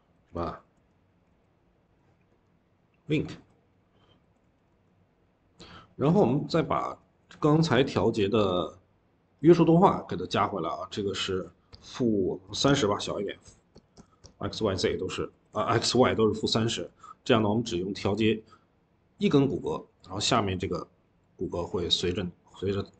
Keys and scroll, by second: 0.9-1.7 typing, 4.3 typing, 7.4 Escape, 7.6 Escape, 12.0-14.6 typing, 15.2 ctrl+s, 16.0 Escape, 16.2-17.0 typing, 22.8 ctrl+z.